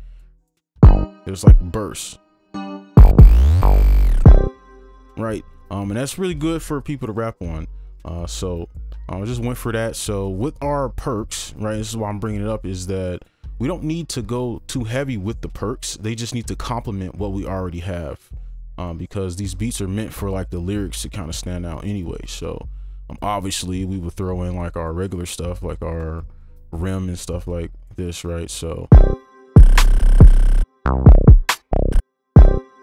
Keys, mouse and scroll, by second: 0.6-2.6 scroll up 1, 4.6 space, 8.0 double click, 27.4 typing.